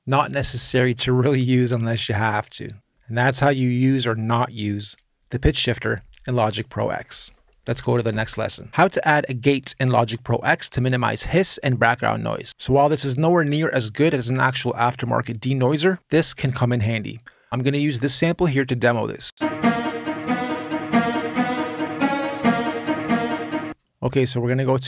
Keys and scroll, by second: 19.0 space, 23.4 space.